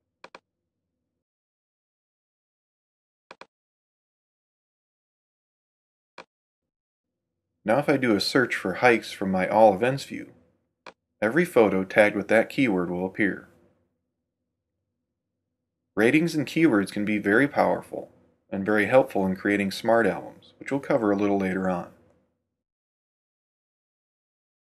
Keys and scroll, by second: 2.3 r, 12.2-13.6 typing.